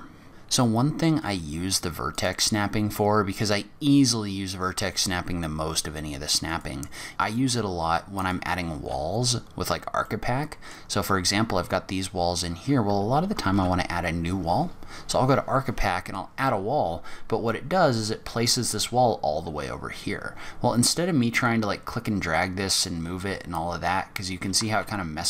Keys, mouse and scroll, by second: 0.3 middle click, 0.3 click, 0.3 scroll down 6, 2.1 click, 8.8-9.3 scroll up 1, 9.3 scroll up 3, 10.0 middle click, 10.9 scroll down 4, 11.3-12.3 scroll up 1, 12.3-13.0 scroll up 1, 13.5 shift+a.